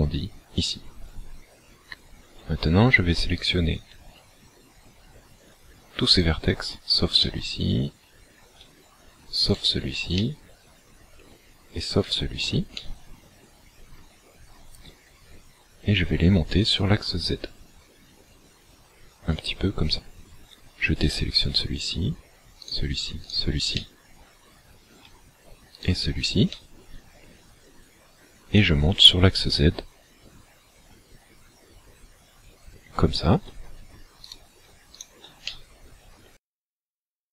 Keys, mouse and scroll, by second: 1.8-2.7 scroll up 1, 3.5 alt+right click, 6.2 shift+right click, 7.2 middle click, 8.4-8.8 scroll up 4, 9.6 shift+right click, 10.2 middle click, 12.0 shift+right click, 12.8 middle click, 14.4 scroll down 2, 16.8 click, 21.1 shift+right click, 22.7 shift+right click, 23.4 shift+right click, 23.8 middle click, 25.9 shift+right click, 26.6 middle click, 28.7 click, 34.2 shift+right click, 35.0 shift+right click, 35.5 middle click.